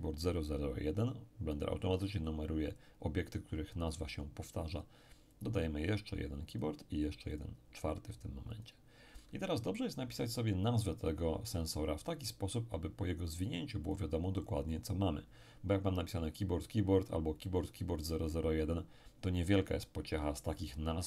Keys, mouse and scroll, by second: 5.3 click, 6.5-8.3 drag, 8.5 click, 13.9-15.4 drag.